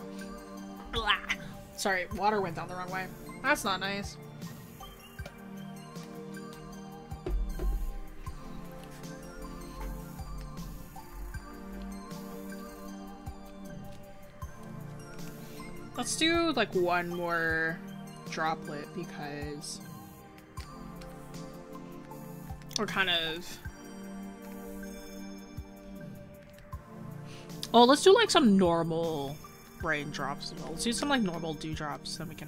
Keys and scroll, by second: 12.0 scroll, 15.2 scroll down 1, 15.8 scroll up 1, 22.9 scroll down 1, 23.8-24.2 scroll up 1.